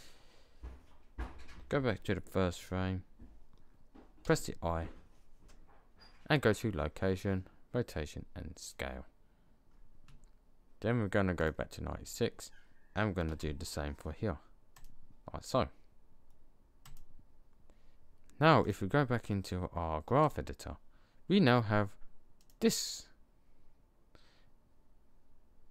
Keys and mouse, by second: 2.4-4.1 drag, 4.1 i, 11.2 click, 12.3 click, 13.2 i, 20.4-21.6 middle drag, 24.4-25.7 middle drag.